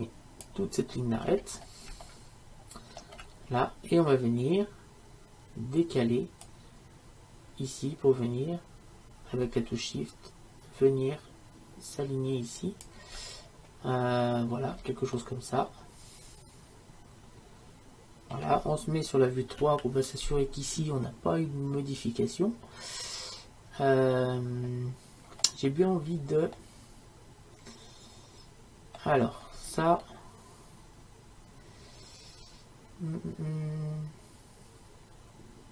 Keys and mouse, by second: 1.3 middle click, 2.4-12.8 middle drag, 16.2 middle click, 19.6 KP_3, 26.6-28.8 middle drag.